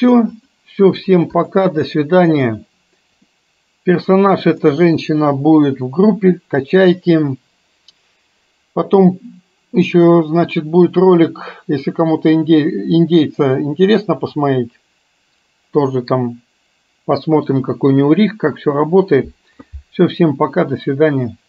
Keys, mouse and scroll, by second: 0.4 click, 1.4 click, 3.3-4.7 middle drag.